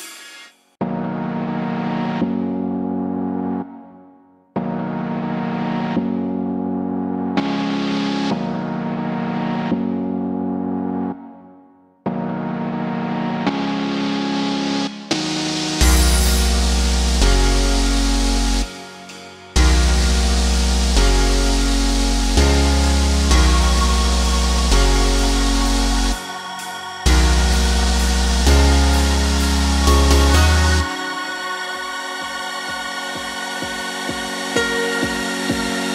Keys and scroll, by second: 0.9 1, 1.3 9, 1.7 1, 3.5 ctrl+c, 9.5 ctrl+v.